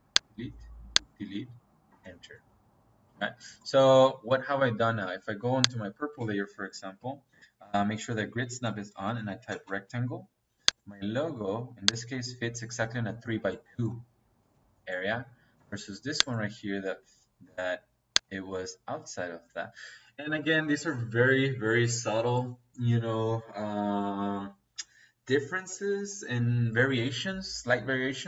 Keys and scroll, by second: 1.8 space, 6.7 Escape, 8.9 r, 9.3 e, 9.4 c, 9.6 space, 15.5 space.